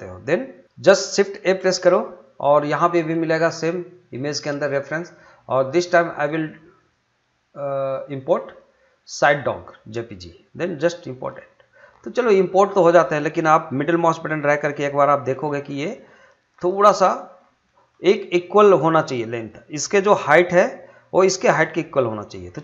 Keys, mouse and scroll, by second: 1.1 shift+Num_Lock, 1.4 shift+a, 4.6-10.7 drag, 14.0-15.5 middle drag, 15.5 scroll, 16.6 middle click, 17.4 scroll down 1, 17.6 middle click, 22.1 middle click.